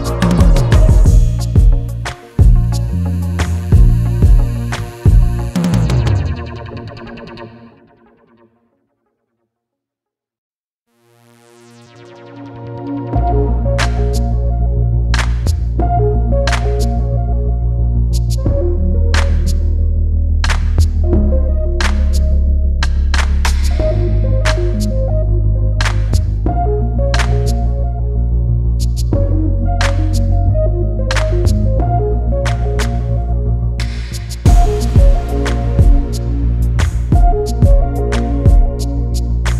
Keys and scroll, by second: 11.5 shift+Return, 18.3 ctrl+alt+s.